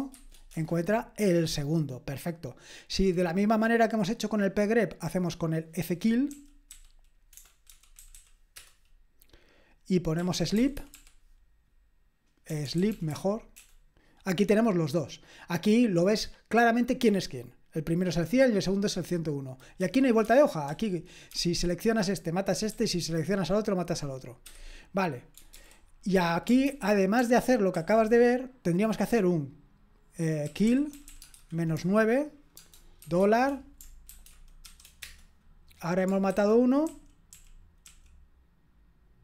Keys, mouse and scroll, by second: 0.0-0.1 typing, 0.5 Return, 6.0-8.6 typing, 10.1-11.4 typing, 12.5-13.6 typing, 20.2 Up, 20.7 Down, 21.3 Up, 25.5 ctrl+c, 26.6 ctrl+p, 27.2 ctrl+p, 27.7 ctrl+a, 30.2-33.2 typing, 34.1 ctrl+e, 34.4-35.2 typing, 36.3 super+h, 36.8 super+k, 37.3 super+l.